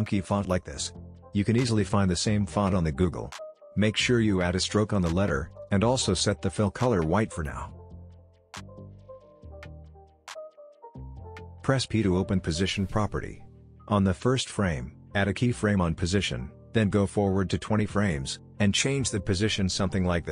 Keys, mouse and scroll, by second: 5.7 click, 6.7-7.3 alt+scroll up 1, 7.7 alt+scroll down 1, 8.1 click, 9.4 alt+scroll down 1, 10.2 click, 12.4 p, 15.0 click, 17.4-17.8 alt+scroll down 2, 18.5-19.0 alt+scroll up 2, 19.0-19.9 alt+scroll down 2, 20.0-20.3 shift+click.